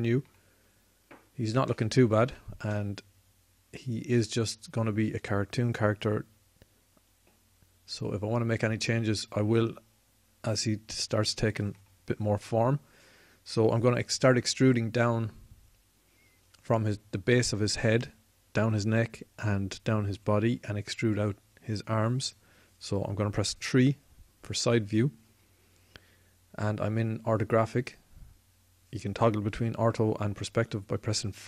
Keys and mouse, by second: 2.0-5.2 middle drag, 23.6 KP_3, 23.7 KP_3, 30.4 KP_5, 30.8 KP_5.